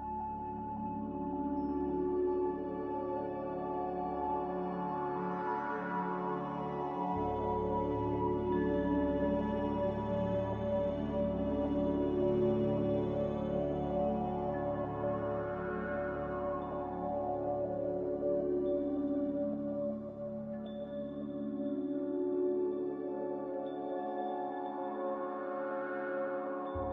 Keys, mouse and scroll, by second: 0.0-0.7 typing, 3.9-4.8 typing, 12.0 b, 14.2-15.0 typing, 16.2-17.0 typing, 17.4 Return, 18.9-19.7 typing, 25.5-26.9 typing.